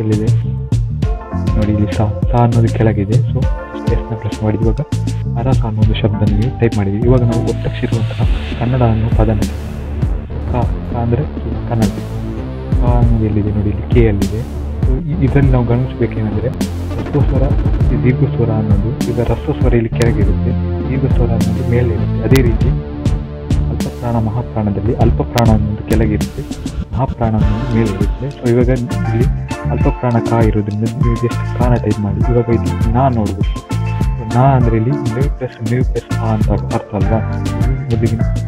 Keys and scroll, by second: 3.8-4.5 typing, 31.8-32.4 typing, 35.8 typing.